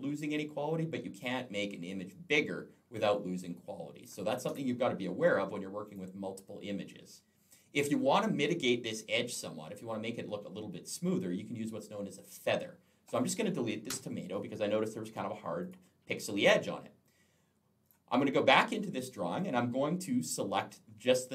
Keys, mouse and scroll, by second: 4.3 Escape, 5.7 click, 12.9 click, 13.7 Delete, 15.5 click, 17.6 click.